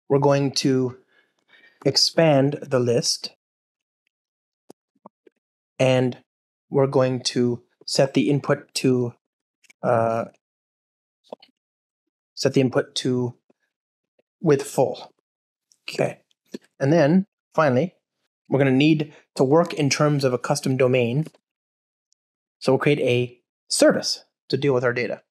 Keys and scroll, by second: 4.7 Return, 5.1 alt+shift+Right, 9.6 Return, 12.1 Return, 19.7 alt+super+l, 20.4 super+BackSpace.